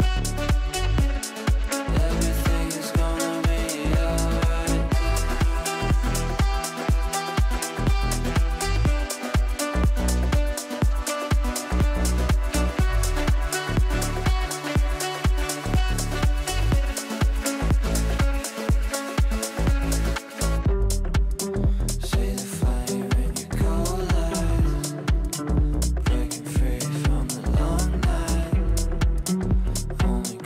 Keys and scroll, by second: 14.7 Delete, 17.1 shift+F2, 17.3 Escape, 21.6 g, 29.8 g.